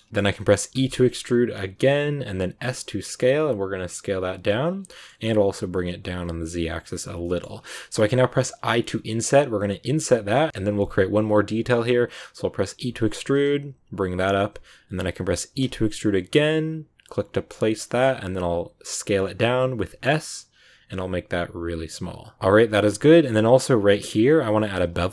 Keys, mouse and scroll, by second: 0.1 middle click, 0.6 e, 4.8 middle click, 5.2 g, 7.0 scroll down 2, 7.1 middle click, 7.3 scroll up 2, 8.5 i, 10.5-11.5 middle drag, 11.5 scroll down 1, 11.6-12.7 middle drag, 12.7 e, 17.8-18.8 middle drag, 18.8 s, 22.3-23.6 middle drag, 23.6-25.1 scroll up 1.